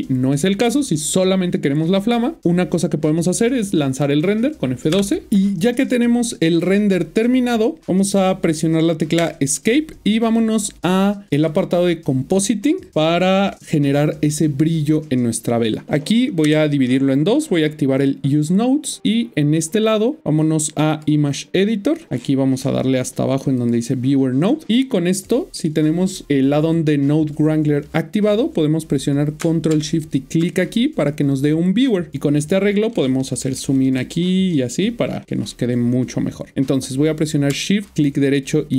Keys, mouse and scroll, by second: 4.9 F12, 11.4 click, 16.4 Left, 18.0 click, 22.1 scroll down 9, 23.5 click, 29.4 click, 30.0 ctrl+shift+click, 32.9 scroll down 1, 33.4 scroll down 1, 33.6 scroll up 4, 33.7 scroll down 1, 33.8 scroll up 1, 33.9 scroll down 1, 34.3 scroll up 1, 34.5 scroll down 1, 34.6-35.2 scroll up 5, 35.2 scroll down 1, 35.8-36.5 scroll up 1, 37.9 shift+right click.